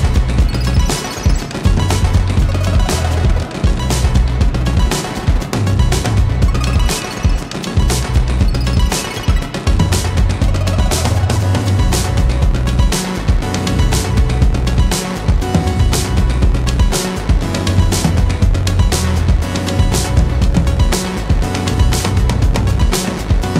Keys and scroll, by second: 16.6 ], 22.7 ], 23.1 ].